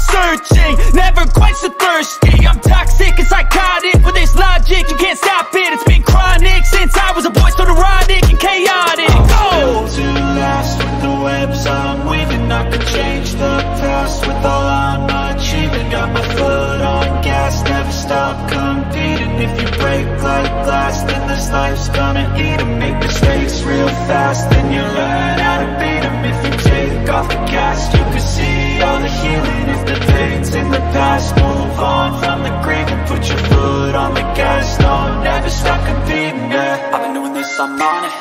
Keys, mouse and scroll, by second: 0.2 click, 0.7 e, 1.1 click, 3.1 e, 3.4 click, 3.9 b, 4.6 click, 5.0 e, 5.2-6.7 drag, 7.5-9.1 drag, 9.3 b, 10.6 click, 11.0 e, 11.2-12.5 drag, 12.5 ctrl+z, 12.8-14.5 drag, 14.6 b, 15.3 click, 15.8 e, 16.0 click, 17.4 ctrl+-, 18.3 ctrl+-, 20.2 click, 22.7 click, 25.8 click, 26.5 click, 27.8 click, 28.9 b, 30.4 ,, 31.7 b, 32.1 click, 32.7 ctrl+z, 33.0 click, 33.8 ctrl+z, 34.1 click, 34.7 ctrl+z, 35.0 click, 37.0 click, 37.7 ctrl+z.